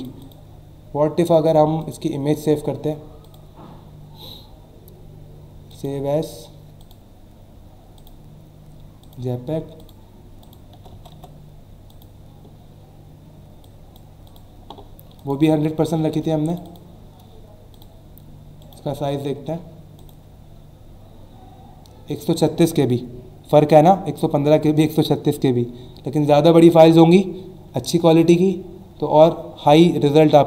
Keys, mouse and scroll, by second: 1.3 click, 1.8 click, 3.2 click, 5.7 click, 6.8 click, 7.9 click, 9.0 click, 9.8 click, 10.4 click, 10.7-11.1 typing, 11.9 click, 13.6 click, 15.1 click, 16.5 click, 17.7 click, 18.6 right click, 20.0 click, 28.0 click.